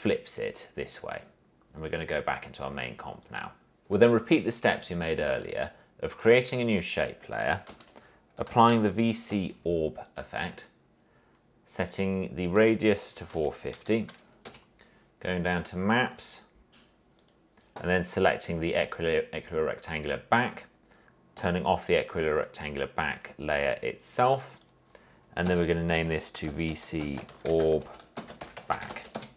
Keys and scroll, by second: 7.9 ctrl+space, 8.4-9.4 typing, 13.1-14.4 typing, 14.6 Return, 25.7 Return, 26.4-29.3 typing.